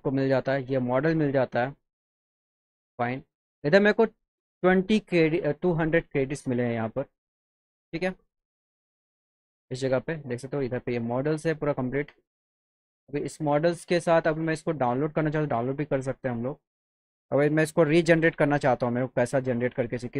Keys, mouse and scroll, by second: 9.5-10.5 drag, 10.8 click, 11.6 click, 12.4 click, 14.0 click, 15.0 click.